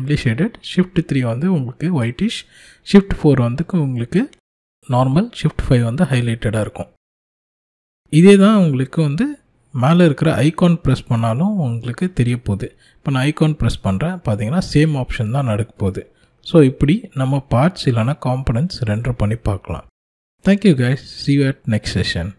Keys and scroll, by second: 0.4 shift+3, 1.5 shift+4, 3.1 shift+5.